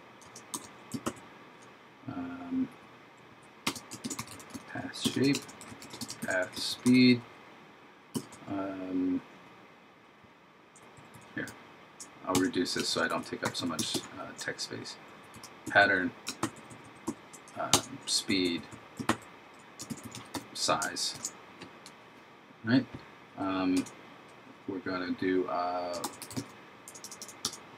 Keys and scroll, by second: 1.1 super+Right, 4.1 shift+s, 5.5 shift+p, 6.3 shift+s, 13.0 shift+p, 16.5 shift+Right, 19.1 super+Right, 20.0 shift+s, 21.2 shift+0, 26.1 shift+v.